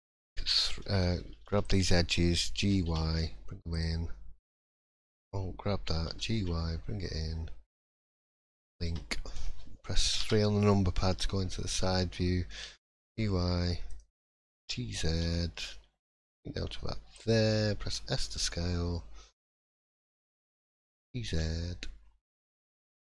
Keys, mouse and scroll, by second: 0.6 3, 0.9 2, 1.6 alt+click, 2.6 g, 4.8 alt+click, 6.0 g, 10.2 l, 10.2 KP_3, 11.1 scroll up 1, 11.5 shift+middle click, 12.6 g, 14.5 g.